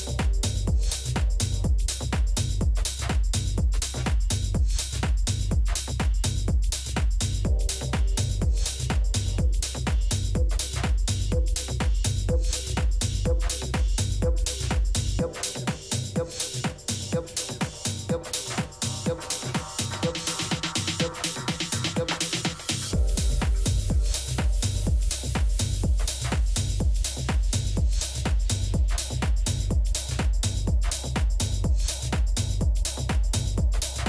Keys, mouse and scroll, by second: 1.2-3.4 middle drag, 3.4 KP_7, 8.0-11.0 middle drag, 12.0 right click, 12.5 Tab, 13.1 a, 13.4 a, 13.8-16.0 middle drag, 16.5-20.2 middle drag, 19.4 z, 20.3 a, 20.6 a, 22.1 b, 23.1 b, 25.3-26.9 middle drag, 26.9 KP_7, 29.4 middle click, 31.2 middle click, 31.3-33.3 drag, 33.0-34.0 middle drag, 33.3 z.